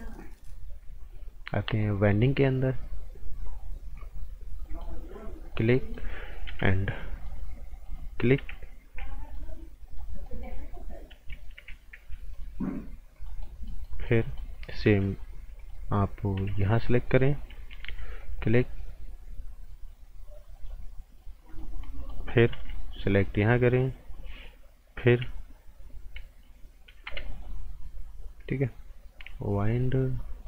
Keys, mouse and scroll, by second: 2.0 click, 4.6 right click, 5.4 click, 5.7 right click, 6.4 b, 7.2 click, 8.9 g, 9.3 click, 10.2 right click, 12.3 click, 13.4 right click, 15.6 click, 16.4 b, 16.6 click, 17.8 g, 18.2 click, 21.8 right click, 22.5 b, 23.0 click, 27.0 g, 27.3 click.